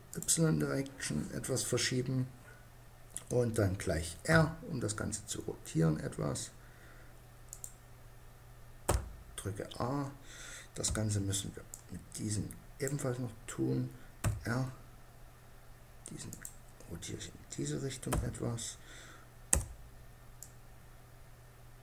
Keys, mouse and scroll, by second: 3.8 r, 8.4 a, 10.4 b, 13.6 r, 15.9-17.0 drag, 17.6 a, 18.9 b.